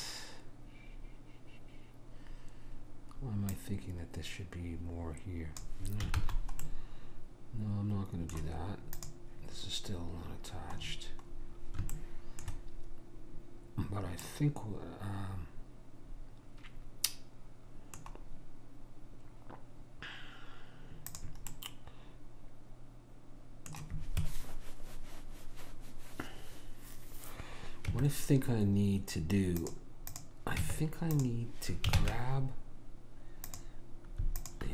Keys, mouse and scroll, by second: 3.6 click, 6.2 ctrl+z, 9.0 click, 11.0-16.1 middle drag, 21.1 click, 21.5-24.5 middle drag, 27.9 Tab, 30.1 click, 30.6 Tab, 32.0 ctrl+Tab, 34.4 click.